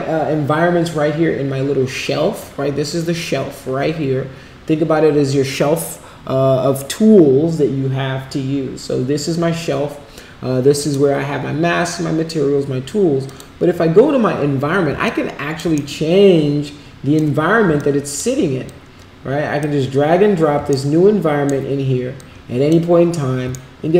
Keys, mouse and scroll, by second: 10.7 click, 13.2 click, 15.0 alt+click, 15.9-17.1 shift+right drag, 17.7 alt+click, 18.6-19.6 drag, 20.6 shift+right click, 22.1 click, 23.5-23.9 shift+right drag.